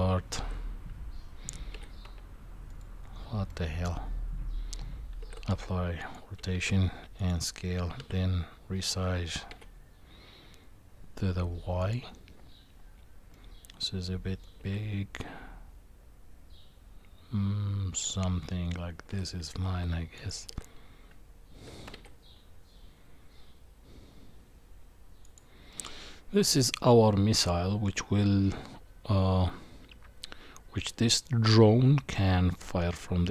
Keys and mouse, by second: 3.5 middle click, 5.2 ctrl+a, 6.5 ctrl+a, 8.0 s, 13.3-14.4 middle drag, 14.6 s, 19.1 g, 20.5 s, 25.7-33.3 middle drag.